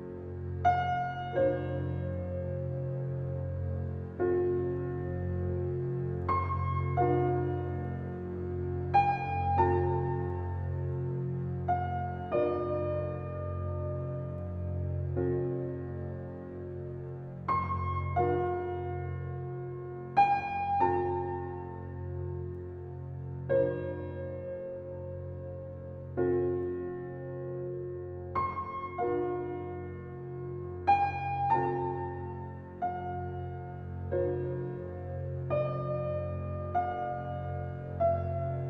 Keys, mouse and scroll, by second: 8.1 scroll up 2, 8.5 click, 9.5-10.5 drag, 11.2-14.4 drag, 15.9 Tab, 16.4 click, 16.9 click, 18.1-19.9 drag, 19.9-21.8 middle drag, 32.4-33.2 middle drag.